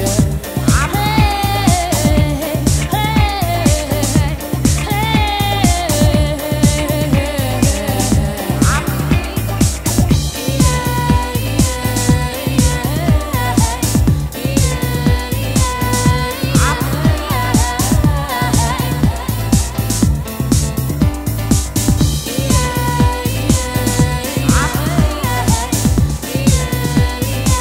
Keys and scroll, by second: 27.0 super+Tab.